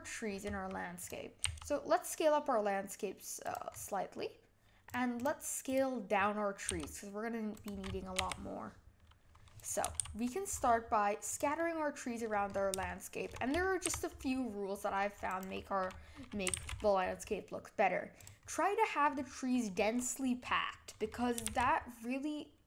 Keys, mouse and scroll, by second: 1.0 click, 1.4 s, 3.7 scroll up 5, 4.8 click, 5.1 click, 5.6 click, 6.1-6.7 scroll down 1, 6.7 s, 8.2 g, 9.8 g, 11.6-12.4 middle drag, 12.4-12.9 scroll up 4, 12.9-13.8 shift+middle drag, 13.8 g, 16.4 g, 18.5-19.1 middle drag, 19.1-19.6 scroll down 4, 19.6-20.4 middle drag, 20.4-21.4 scroll up 1, 21.4 shift+d.